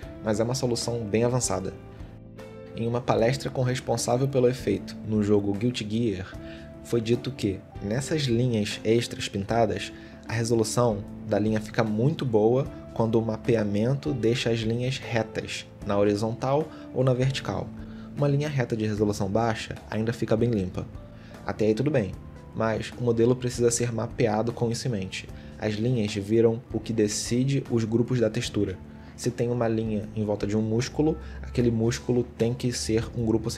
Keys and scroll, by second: 1.4 ctrl+z, 1.9 shift+x, 3.1 shift+x, 3.7 shift+x, 5.2 ctrl+z, 8.3 shift+x, 9.2 ctrl+z, 9.7 shift+x, 11.4 ctrl+z, 12.1 shift+x, 14.2 ctrl+z, 15.1 shift+x, 16.0 shift+x, 16.7 shift+x, 17.2 ctrl+z, 17.8 ctrl+z, 24.0 ctrl+z, 25.0 ctrl+z, 27.3 ctrl+z, 30.6 ctrl+z, 33.1 ctrl+z.